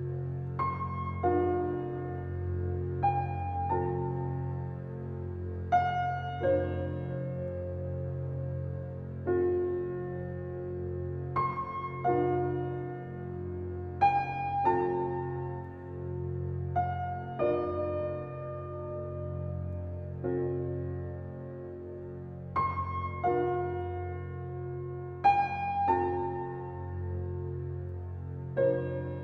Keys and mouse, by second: 3.2 click, 4.6 2, 5.0 click, 5.5 shift+click, 5.6 ctrl+b, 5.9 ctrl+r, 9.0 g, 12.7 Tab, 13.3 click, 14.5 click, 14.9-15.7 drag, 16.6 click, 19.6 click, 20.1 click, 21.4 click, 22.0 Tab, 23.6 2, 23.9 click, 24.8 2, 25.3 click, 26.0 Tab, 26.7 click, 27.3 middle click, 28.2-29.2 drag.